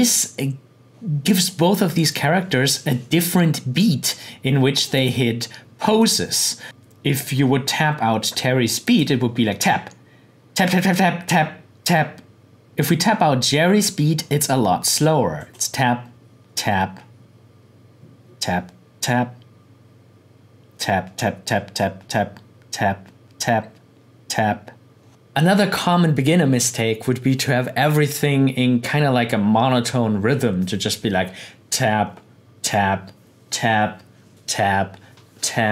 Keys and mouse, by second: 4.1-8.6 drag, 8.8 click, 12.7-14.8 drag, 15.3 click.